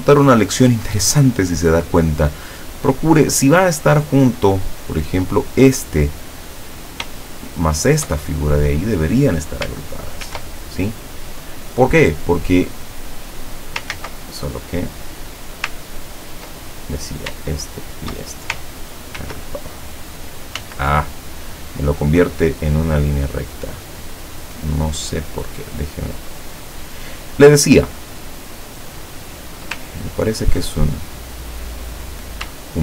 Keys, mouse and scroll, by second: 4.9 click, 6.4-6.7 scroll down 2, 7.3 shift+click, 8.4-8.9 shift+scroll up 3, 10.3 ctrl+g, 13.0 click, 13.5 scroll up 2, 14.0 ctrl+z, 14.9 middle click, 16.0-16.3 ctrl+scroll down 2, 17.0 ctrl+click, 17.7 shift+click, 19.2 ctrl+g, 20.7 ctrl+z, 23.6 click, 26.8 click, 30.1-30.6 ctrl+scroll up 2, 32.0 click.